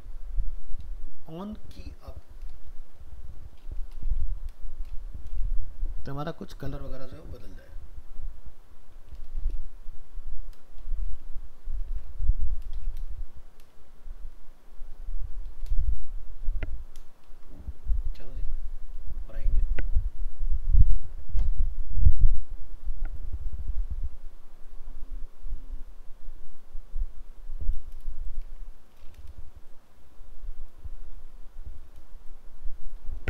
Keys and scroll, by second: 11.2 ctrl+c, 13.0 ctrl+v, 17.3 ctrl+s.